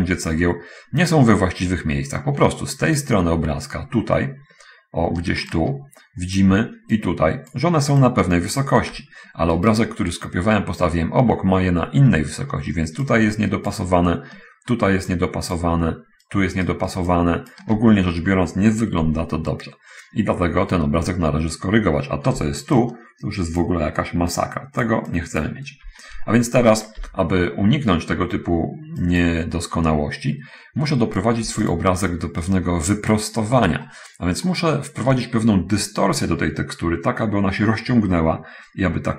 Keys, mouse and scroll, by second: 3.3 right click, 5.2 d, 5.3 d, 5.9-6.7 drag, 5.9 d, 7.3 click, 8.2 click, 9.7 right click, 12.5 d, 12.7 d, 13.5-14.3 drag, 15.5 click, 16.6 right click, 17.2 click, 22.7 d, 23.0 d, 23.2 click, 24.7-25.4 drag, 25.5 click, 27.7 n, 29.2 click, 30.6 middle click, 30.9-31.5 scroll up 1, 31.8 x, 32.1 click, 32.7 right click, 33.3-33.6 scroll up 1, 33.8-35.3 shift+middle drag.